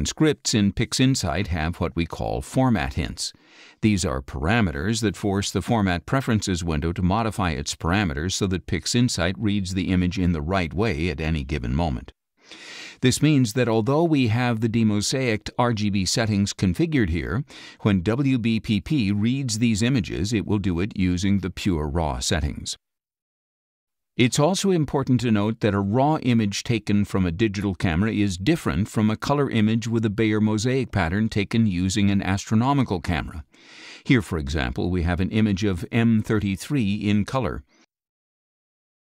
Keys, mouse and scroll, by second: 20.5 click, 22.9 click, 27.5 click, 30.4-32.7 drag, 33.6 click, 34.8 ctrl+a, 38.0 middle click, 38.0-39.1 scroll down 5, 38.3 middle click, 38.7 middle click.